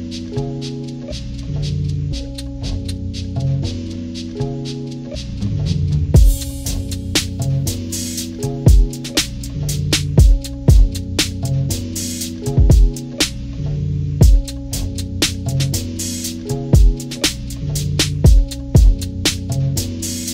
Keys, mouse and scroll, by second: 2.1-4.4 drag, 5.8 click, 8.4-9.8 drag, 10.7 click, 16.0 click, 18.3 click, 19.1 click.